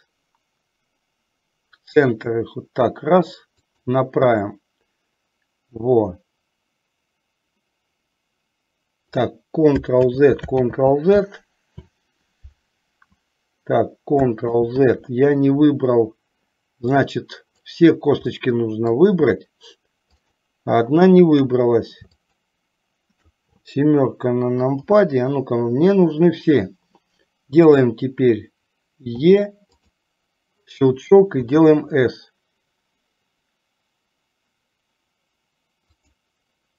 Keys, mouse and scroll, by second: 10.1 ctrl+z, 10.9 ctrl+z, 14.6 ctrl+z, 17.0 click, 18.4 middle click, 20.3 shift+click, 21.0 shift+click, 24.9 KP_7, 29.3 e, 31.5 s.